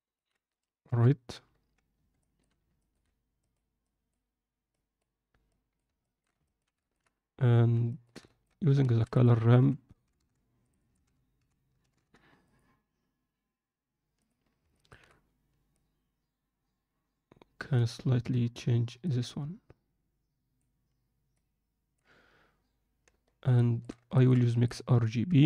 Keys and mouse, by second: 2.2 alt+shift+middle click, 2.8 ctrl+middle click, 3.8-4.7 drag, 5.4 click, 6.1 alt+shift+middle click, 6.5 ctrl+alt+middle click, 7.8 ctrl+middle click, 8.3 alt+shift+middle click, 10.8-14.2 alt+drag, 14.7 alt+shift+middle click, 15.8-17.9 drag, 19.0-20.6 drag, 21.4 click, 23.6 alt+shift+middle click, 24.5 alt+shift+middle click.